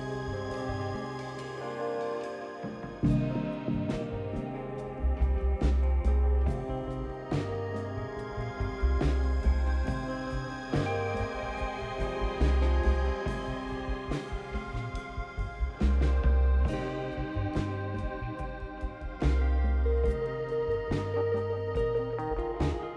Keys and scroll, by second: 0.9-2.8 typing, 8.0-8.8 typing, 10.5 Delete, 12.7-16.2 typing.